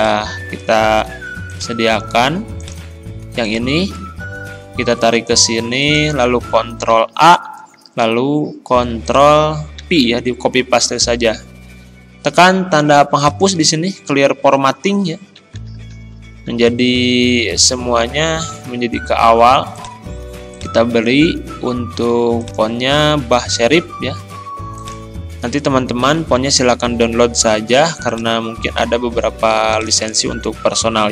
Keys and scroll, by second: 1.1 ctrl+c, 6.7 ctrl+a, 8.1 ctrl+v, 9.8 ctrl+a, 15.4 ctrl+], 26.1 ctrl+[, 30.1 ctrl+a.